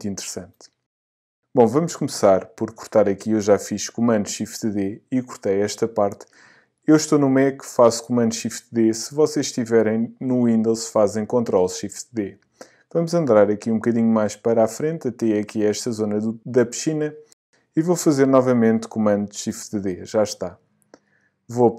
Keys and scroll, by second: 0.2 shift+super+d, 19.5 shift+super+d.